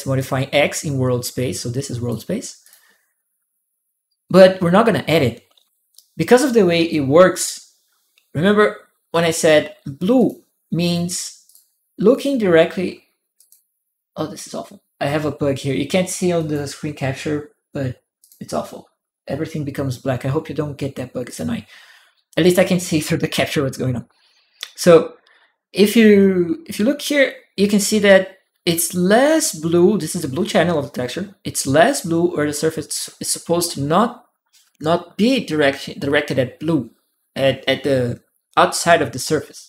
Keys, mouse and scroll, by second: 1.6 click, 2.4 click, 8.9 click, 10.0 click, 10.6 click, 11.2 click, 11.9 ctrl+click, 13.2 ctrl+click, 16.2 ctrl+click, 18.0 ctrl+click, 21.0 ctrl+click.